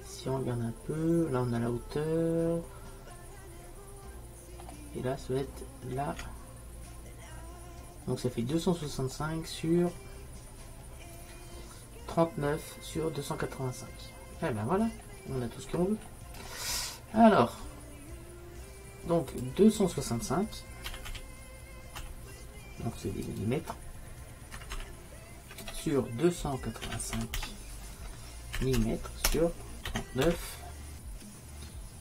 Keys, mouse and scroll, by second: 0.1 middle click, 5.4-8.2 middle drag, 8.6 middle click, 9.4 middle click, 19.4-21.2 drag, 21.2-24.8 middle drag, 24.8 m, 28.8 m.